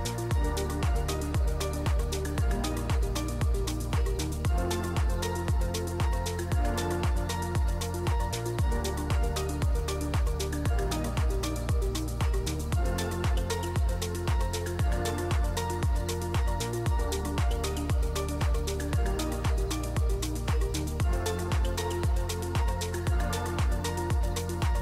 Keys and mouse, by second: 0.1 middle drag, 10.6 middle click, 13.5 ctrl+shift+click, 14.0 middle click, 15.8 shift+click, 17.6-18.0 ctrl+shift+drag, 18.2 middle click, 22.9 click.